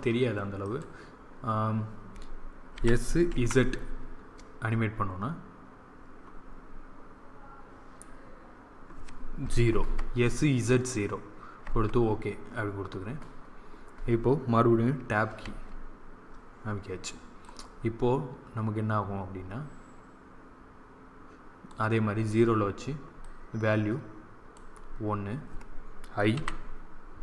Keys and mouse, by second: 2.6 s, 15.3 Tab, 17.4-19.2 drag, 23.1-24.9 drag, 26.3 i.